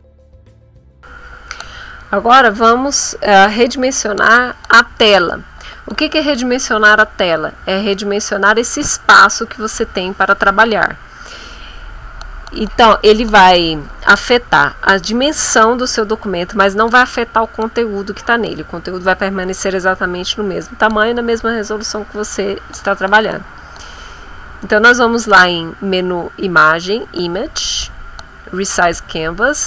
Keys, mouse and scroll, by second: 1.0-27.0 drag.